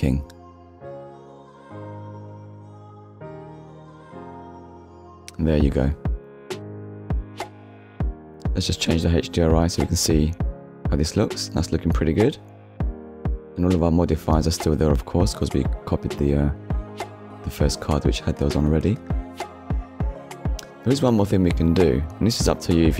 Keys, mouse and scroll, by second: 0.1 scroll up 1, 0.5 click, 1.1 click, 1.4 click, 1.6 k, 1.7 i, 1.8 Return, 2.3 click, 2.6 click, 2.9 k, 3.2 BackSpace, 3.4 BackSpace, 3.6 k, 4.0 scroll up 1, 4.2 click, 5.2 click, 5.7 click, 6.5 click, 6.9 click, 7.2 middle click, 8.5 click, 8.8 click, 9.3 click, 9.6 middle click, 10.3 middle click, 10.8 middle click, 11.5 shift+middle click, 11.9 ctrl+middle click, 12.1 click, 12.6 click, 13.0 click, 13.2 click, 13.4 click, 13.6 click, 13.7 middle click, 14.2 ctrl+s, 16.4 click, 17.9 click, 19.8-20.2 scroll down 1, 21.0 middle click, 21.5-21.9 scroll down 1, 22.0 middle click, 22.4-22.8 scroll up 1.